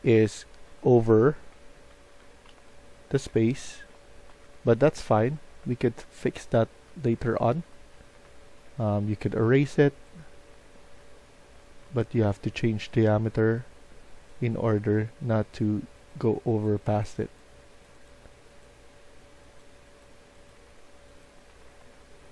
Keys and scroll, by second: 0.0-5.3 typing, 6.6-11.5 typing, 21.2-22.3 typing.